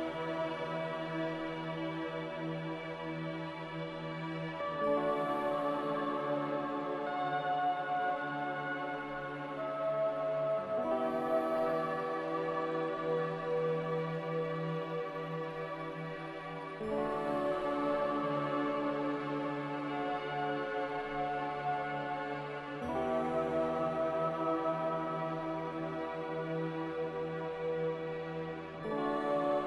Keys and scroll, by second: 9.6 0.